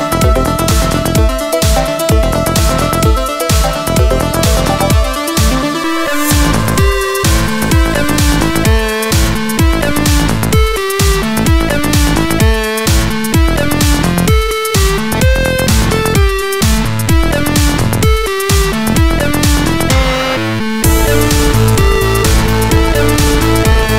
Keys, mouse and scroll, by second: 0.4 middle click, 0.4 scroll down 1, 1.1 alt+middle click, 11.1 scroll up 1, 13.5 click, 13.6 click, 14.5 click, 14.6 click, 15.5 middle click, 15.9 middle click, 15.9 scroll down 1, 16.3 F2, 17.1 middle click, 17.3 middle click, 17.7 alt+middle click, 21.0 middle click, 22.4 scroll up 1, 22.7 middle click.